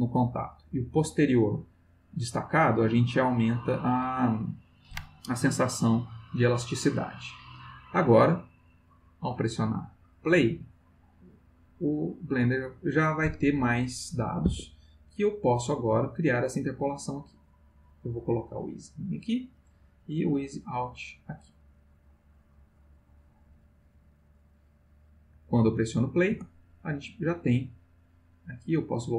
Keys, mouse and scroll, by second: 1.0 click, 9.2 click, 14.4 Escape, 15.7-16.6 drag, 17.4 click, 19.1 click, 20.4 click, 21.4 click, 22.8 click, 23.5 click, 24.4 click, 26.3 space, 28.8 click.